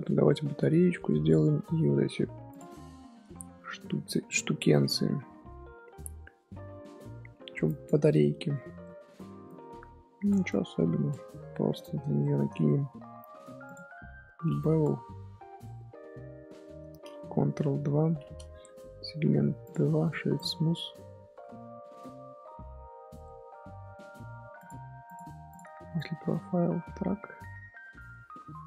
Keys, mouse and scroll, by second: 0.0-2.5 shift+middle drag, 2.5 click, 2.8-3.6 middle drag, 3.6-4.0 scroll up 2, 4.0-4.6 middle drag, 4.6 scroll down 1, 4.8 middle click, 5.3-6.0 scroll up 2, 6.0-9.2 middle drag, 11.5-13.6 middle drag, 14.8-16.6 drag, 17.6 ctrl+2, 19.6 click, 20.0-20.7 right drag, 20.7-24.5 middle drag, 24.5-28.6 drag.